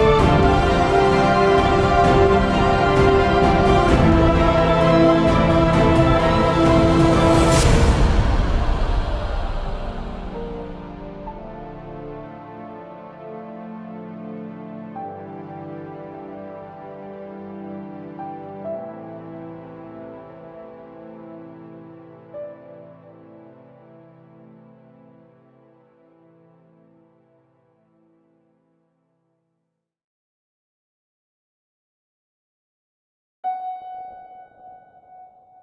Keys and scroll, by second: 5.7-6.5 typing, 10.3-11.3 typing, 11.4 Return, 18.5-19.7 typing, 20.6 Up, 20.6 Return, 25.9 Delete, 33.0-33.6 typing, 34.6 Down, 34.8 Down.